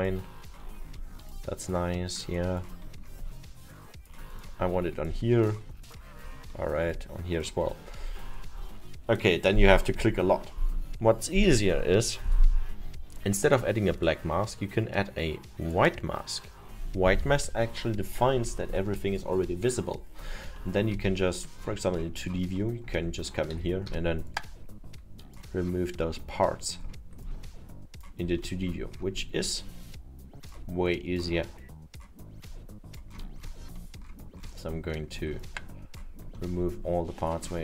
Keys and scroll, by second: 23.2 F1, 23.6 x.